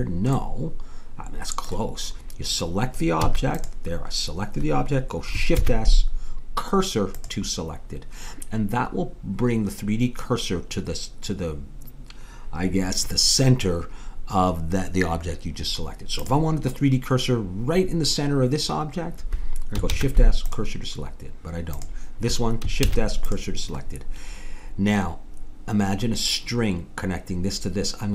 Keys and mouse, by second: 3.2 a, 3.6-5.3 drag, 5.6 shift+s, 16.2-19.9 drag, 19.9 shift+s, 21.7-26.1 drag, 22.9 shift+s.